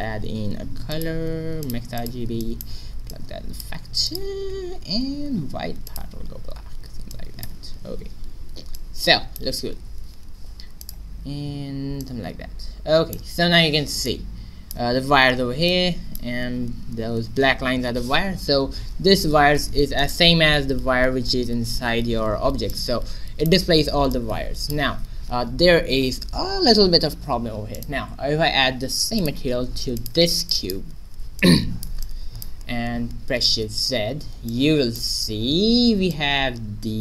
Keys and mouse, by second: 2.4-7.7 drag, 8.7-9.9 drag, 9.9 shift+z, 10.8-12.4 drag, 13.8 middle click, 16.0 middle click, 16.5-17.7 middle drag, 19.3 shift+z, 20.0 middle click, 20.3 Tab, 20.8 right click, 21.1 a, 22.3 middle click, 24.7-26.9 middle drag, 24.8 Tab, 27.7 right click, 29.2 middle click, 29.6 click, 30.4 middle click, 30.9 a, 33.9 shift+z.